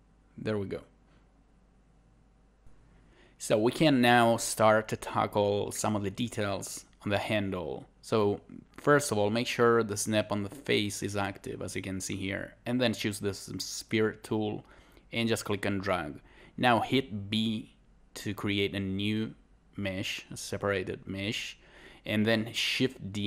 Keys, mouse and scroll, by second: 2.7 shift+2, 3.0 scroll down 1, 3.4 scroll up 1, 4.1 scroll down 1, 4.9 scroll up 1, 6.9 scroll down 1, 7.0 scroll up 1, 7.0-12.9 scroll down 1, 12.9 scroll up 1, 19.4 right click.